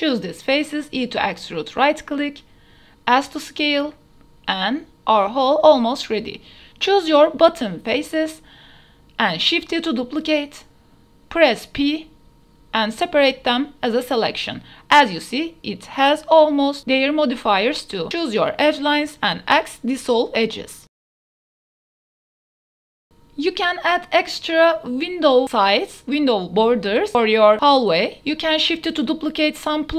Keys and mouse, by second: 0.6 shift+click, 1.0 e, 1.4 alt+s, 3.2 s, 3.4 z, 4.4 Tab, 4.8 KP_0, 5.2 a, 5.3 a, 5.6 Tab, 5.6 ctrl+s, 5.6 KP_0, 5.9 Tab, 6.3 click, 8.2-8.6 shift+drag, 8.9 shift+click, 9.3-10.3 drag, 10.8 shift+d, 11.2 z, 12.3 shift+click, 14.2 p, 14.5 Tab, 15.5 click, 15.9 Tab, 16.6 2, 17.5 alt+shift+click, 18.3 x, 20.0 Tab, 20.0 click, 21.0 click, 22.1 click, 22.7 Tab, 22.7 KP_0, 22.7 a, 23.2 Tab, 23.5-24.1 drag, 24.4-24.8 shift+drag, 26.2 shift+d, 26.5 z.